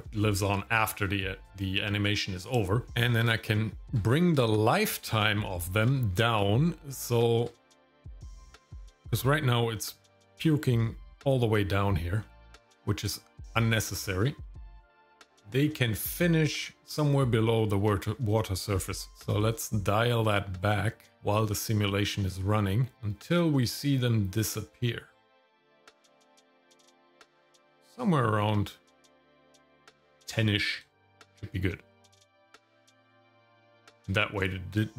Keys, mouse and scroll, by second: 2.9 scroll down 1, 3.4 shift+middle click, 4.1 scroll down 1, 4.4 shift+middle click, 5.3 shift+middle click, 5.9 middle click, 6.4 shift+middle click, 7.6 middle click, 8.1-8.7 scroll down 3, 8.7 middle click, 9.0-9.4 scroll up 2, 9.8 middle click, 10.4 scroll down 2, 10.7 middle click, 12.2 middle click, 12.7 scroll up 1, 13.1 shift+middle click, 13.6 scroll up 2, 14.0 shift+middle click, 14.4 middle click, 14.8 scroll up 2, 15.3 shift+middle click, 15.7 shift+middle click, 16.1 middle click, 19.0-23.9 drag, 23.9-29.8 middle drag, 30.9-32.4 shift+middle drag, 33.0 shift+middle click, 33.3-33.7 scroll up 2, 33.7 shift+middle click, 34.4-34.8 scroll down 1, 34.8 shift+middle click.